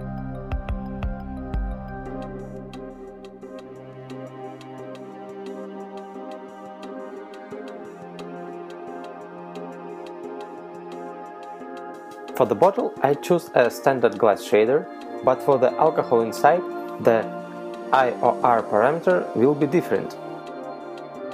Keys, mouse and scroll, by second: 1.0-2.7 scroll down 5, 2.9 shift+middle click, 4.5 right click, 11.5 click, 12.9 click.